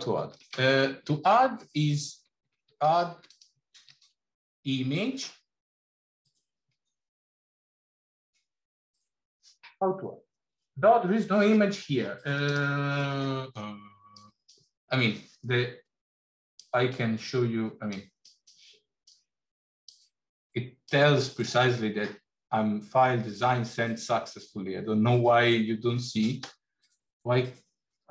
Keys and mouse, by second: 3.1 click, 3.6 shift+a.